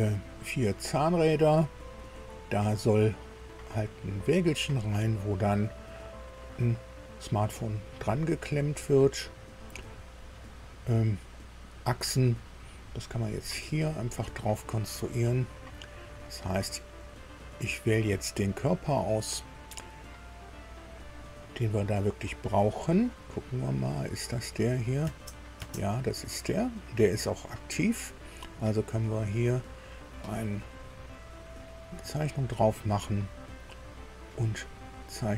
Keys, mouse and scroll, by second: 0.3 click, 2.1-3.6 drag, 13.8 click, 16.5 scroll up 1, 17.1 scroll up 1, 17.9-18.3 scroll up 1, 21.3-22.0 scroll down 2, 22.4 scroll down 2, 22.5-22.9 scroll up 2, 23.3 scroll up 2, 24.5 click, 25.0 space, 25.5 space, 27.2 click, 28.0 click, 29.4 click, 31.7 click.